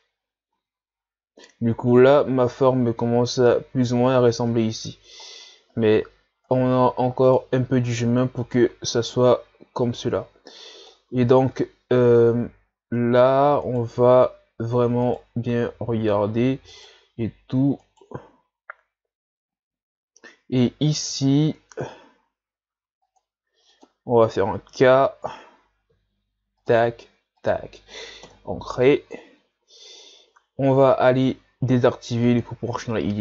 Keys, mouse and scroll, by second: 0.5 Tab, 1.0 scroll down 2, 4.5 Tab, 5.3 scroll up 1, 6.5 right click, 7.6 ctrl+z, 8.4 right click, 9.3-11.1 drag, 11.1 ctrl+z, 12.6 shift+scroll down 2, 13.7 alt+right click, 15.0 alt+right click, 16.7 alt+right click, 17.8 alt+right click, 20.9 ctrl+r, 24.2-25.1 shift+scroll up 3, 25.9 k, 32.3 click.